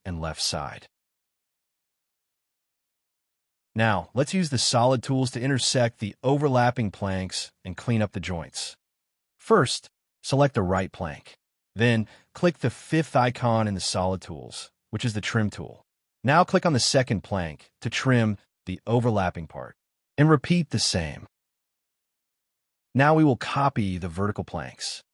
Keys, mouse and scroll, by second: 0.0-0.2 typing, 0.0 middle click, 0.3 scroll down 1, 0.6-1.6 scroll up 1, 1.6 double click, 1.7 scroll down 1, 1.8 space, 2.0 Escape, 2.4 scroll down 1, 3.7 right click, 10.1 middle click, 12.9 middle click, 13.4 space, 16.0 space, 16.6 scroll down 1, 17.0 middle click, 21.5 middle click, 23.7-24.2 scroll up 1.